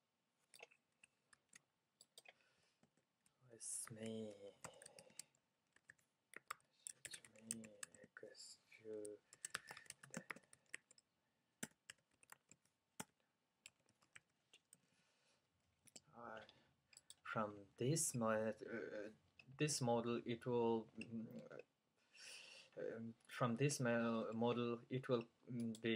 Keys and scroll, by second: 1.5 super+c, 3.9 super+v, 4.7-17.3 typing.